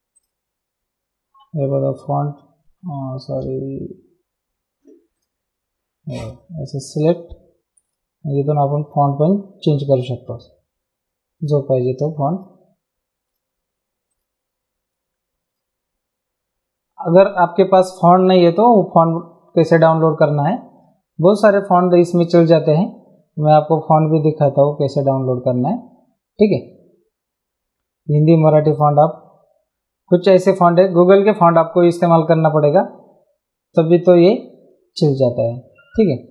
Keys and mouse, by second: 0.1 click, 1.7 t, 2.8 Escape, 5.1 click, 6.2 click, 7.8 click, 11.3 click, 15.5 click, 17.4 click, 19.0 click, 20.7 click, 21.9 click, 28.7 click, 30.1 click, 31.5 click.